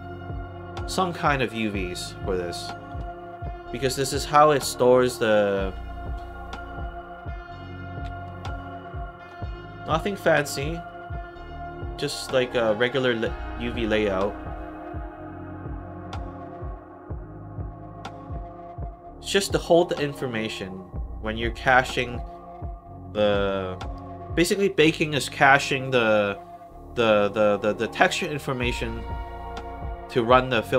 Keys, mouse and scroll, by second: 8.3 alt+middle click, 9.3 alt+middle click, 9.7 alt+right click, 10.4 alt+middle click, 10.8 alt+right click, 11.6 alt+right click, 12.6 alt+middle click, 21.9 click, 27.8 middle click.